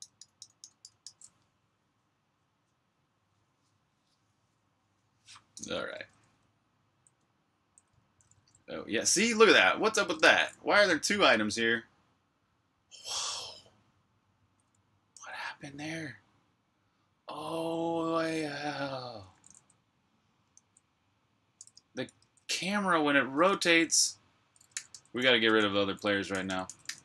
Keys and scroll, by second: 5.9-8.0 typing, 14.9 v, 18.9-20.8 typing, 22.0 super+q, 24.4-27.0 typing.